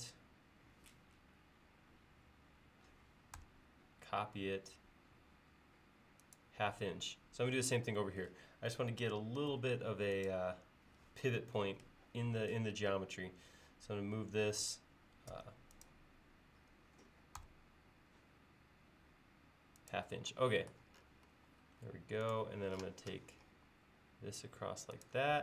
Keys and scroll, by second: 9.5 space, 15.3 m.